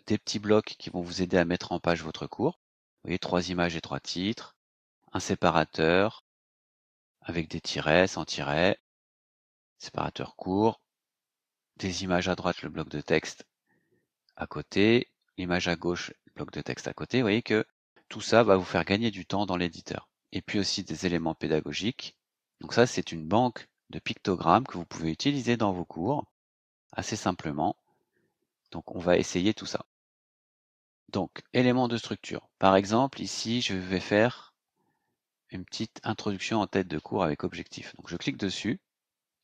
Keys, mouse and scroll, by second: 21.1 click, 21.7 scroll down 2, 29.8 click, 30.6 scroll up 2, 31.7 click, 38.0 click.